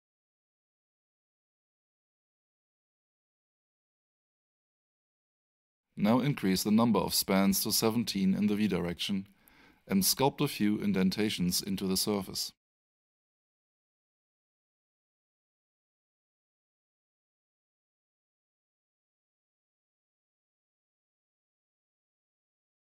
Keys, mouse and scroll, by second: 5.6 click, 14.1 click, 17.5 double click, 19.2-19.6 typing, 21.3 Return.